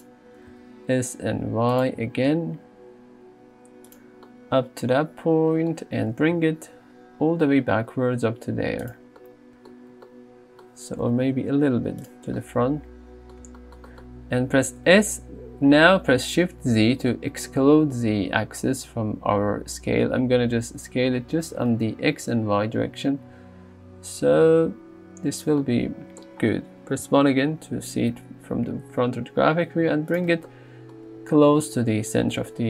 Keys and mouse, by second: 0.4 s, 0.5 z, 2.0 g, 2.3 z, 6.1 g, 6.4 y, 11.1 g, 11.3 y, 14.8 s, 17.0 shift+z, 25.4 click, 27.1 KP_1, 28.3 g, 28.7 x.